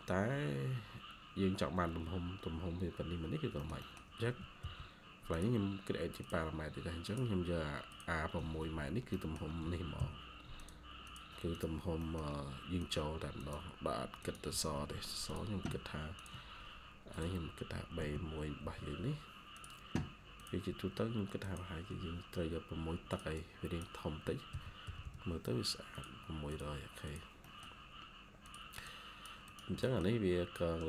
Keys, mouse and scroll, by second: 3.5 middle click, 4.3-5.0 typing, 8.3 Escape, 8.5 Escape, 8.6 scroll up 1, 9.0 middle click, 9.5 typing, 10.9 double click, 11.9 middle click, 14.4 Escape, 14.6 Escape, 16.1 ctrl+click, 17.9-18.5 typing, 23.2 double click, 24.2-25.4 typing, 27.3 middle click, 28.7 double click, 29.7 middle click, 30.1-30.8 scroll down 1.